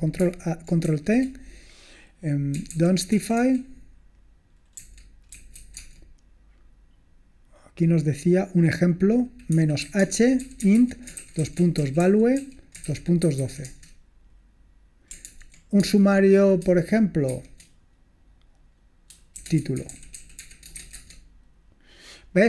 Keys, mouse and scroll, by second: 0.9 ctrl+t, 2.4-6.0 typing, 10.4-13.6 typing, 15.3 ctrl+p, 15.9 space, 17.3 shift+', 19.3-22.4 typing.